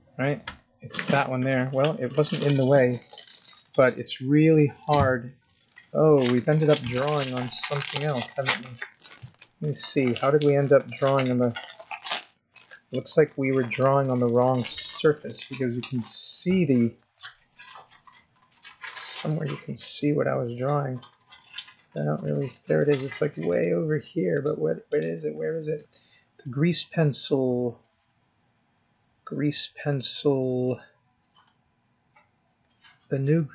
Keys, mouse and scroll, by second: 3.2 scroll up 2, 4.0 scroll down 3, 4.7 middle click, 8.6 scroll up 4, 9.3 scroll up 1, 10.0-10.4 scroll down 4, 10.4 middle click, 16.1-16.5 scroll up 4, 17.2 middle click, 20.7-21.7 scroll down 11, 21.7-23.5 scroll up 6, 23.5 click, 24.3 click, 24.9 click, 26.6 scroll down 2, 27.3-27.9 scroll up 3, 28.2-28.7 scroll up 1, 28.7 scroll down 1, 28.8-29.6 scroll down 2, 31.3-31.7 scroll down 1, 31.9-32.8 scroll down 3, 32.8-33.4 scroll down 4, 33.4-33.5 scroll up 1.